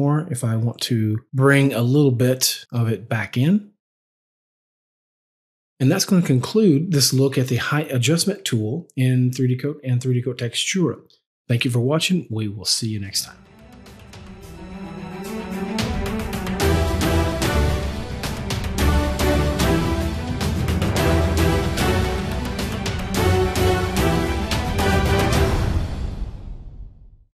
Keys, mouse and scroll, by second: 2.5 double click, 2.6 click, 4.5 click, 4.7 double click, 5.3 click.